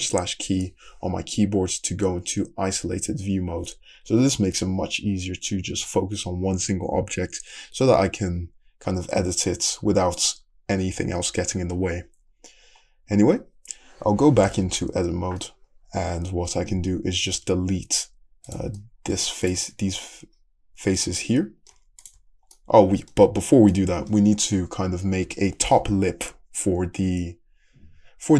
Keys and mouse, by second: 14.9 Tab, 17.4 3, 18.5 click, 18.6-21.7 middle drag, 22.1-28.3 middle drag.